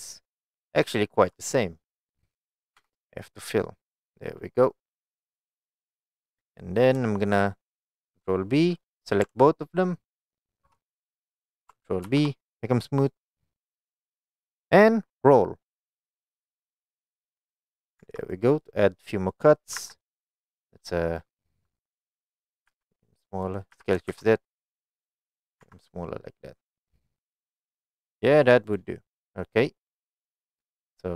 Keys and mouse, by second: 0.5 alt+click, 0.9 alt+click, 1.4 middle click, 2.8 f, 3.6 middle click, 7.1 shift+middle click, 8.9 middle click, 11.0 middle click, 12.1 ctrl+b, 17.7 click, 18.1 Tab, 18.3 click, 18.7-19.5 middle drag, 19.8 Tab, 20.1 middle click, 22.8 s, 23.5 right click, 23.8 s, 24.1 shift+z, 25.5 click, 25.7 Tab, 26.2-28.3 middle drag.